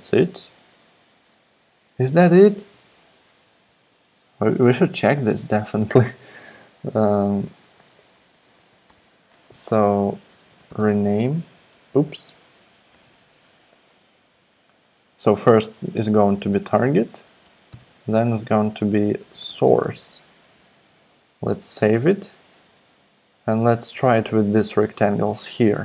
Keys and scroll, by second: 6.4 Down, 7.7 super+/, 8.1 Up, 8.6 super+Right, 8.9 Return, 10.1-12.9 typing, 12.0 super+z, 13.0 Left, 16.2-20.5 typing, 20.5 super+s.